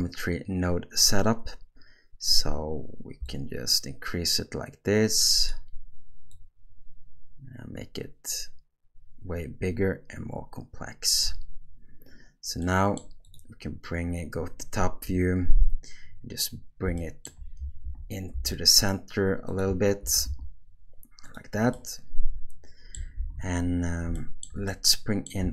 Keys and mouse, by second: 3.3-5.6 shift+drag, 6.3-11.2 shift+drag, 12.6-13.0 middle drag, 15.0 KP_7, 17.0 shift+middle drag, 17.9 g, 20.0 g, 21.7-22.9 middle drag, 23.1 alt+a, 24.1-24.4 shift+middle drag, 24.7-25.2 middle drag.